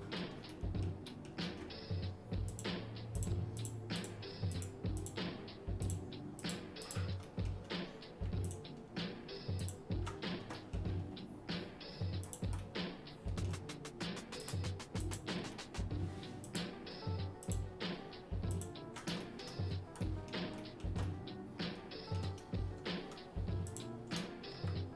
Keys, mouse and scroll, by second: 0.5 shift+middle click, 1.1 shift+middle click, 2.5 shift+click, 3.2 shift+click, 3.6 shift+click, 4.0 shift+click, 4.7 shift+click, 5.1 shift+click, 5.8 shift+click, 6.9 shift+click, 7.3 middle click, 8.5 ctrl+click, 9.6 ctrl+shift+click, 10.6 middle click, 12.3 shift+click, 12.6 shift+middle click, 14.4 shift+click, 15.2 shift+click, 15.6 shift+middle click, 16.5 shift+click, 17.6 shift+click, 18.5 ctrl+shift+click, 19.2 shift+middle click, 19.7 scroll down 1, 19.7 scroll up 1, 20.0 middle click, 20.6 middle click, 21.1-22.2 shift+middle drag, 23.7 ctrl+click.